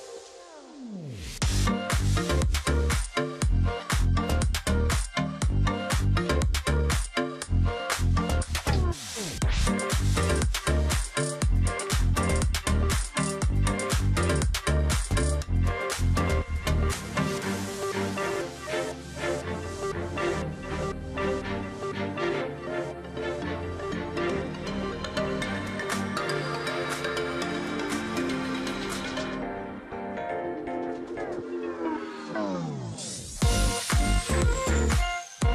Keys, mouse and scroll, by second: 0.6-1.5 alt+scroll down 1, 1.5-2.0 alt+scroll up 1, 2.4-2.9 alt+scroll up 1, 3.0 double click, 4.3 double click, 4.8 alt+scroll down 1, 5.5 alt+scroll down 1, 6.0-6.5 alt+scroll up 1, 6.6 alt+scroll down 1, 6.9-7.4 alt+scroll up 1, 9.6 alt+scroll down 1, 9.9-10.4 alt+scroll up 1, 10.5-11.0 alt+scroll up 1, 16.0 alt+scroll down 1, 16.2 space, 17.1 ctrl+click, 17.8 alt+scroll up 1, 18.1-18.6 scroll down 1, 18.9 space, 19.1 double click, 19.8 ctrl+click, 21.9 ctrl+z, 24.5 alt+click, 26.5 ctrl+z, 27.6 double click, 27.8 space, 28.2 double click, 28.8 ctrl+click, 29.8 shift+click, 30.7 alt+click, 31.4 double click, 31.6-31.9 alt+scroll down 1, 31.9 space, 32.5 alt+scroll up 1, 32.6 space, 33.5 alt+scroll down 1, 33.7-34.3 alt+scroll up 1, 34.3 ctrl+click, 35.3 alt+scroll up 1.